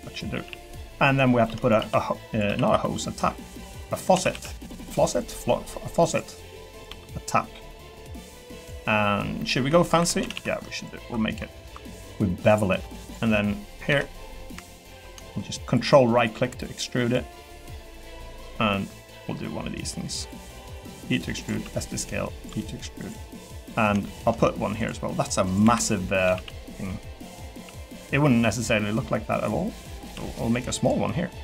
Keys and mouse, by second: 0.0-2.7 typing, 0.6 click, 1.0 click, 2.3 click, 4.1 s, 4.3 x, 5.9 click, 6.9 e, 8.5 click, 10.0 2, 10.2 a, 10.3 a, 10.7 ctrl+alt+click, 11.6 ctrl+b, 12.8 3, 13.9 KP_3, 14.7 shift+middle click, 20.9 e, 21.5 s, 22.5 e, 23.4 middle click, 24.0 shift+middle click, 25.5 click, 25.6 l, 26.3 shift+d, 26.7 y, 27.5 x, 29.8 middle click, 30.1 s, 30.8 click.